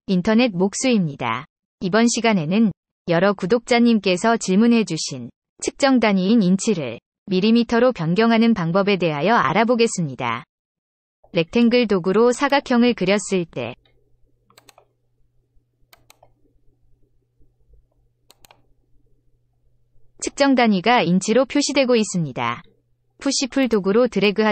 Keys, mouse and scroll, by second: 12.3 click, 14.5 click, 15.9 click, 18.3 click, 23.6 click, 24.2-24.5 drag.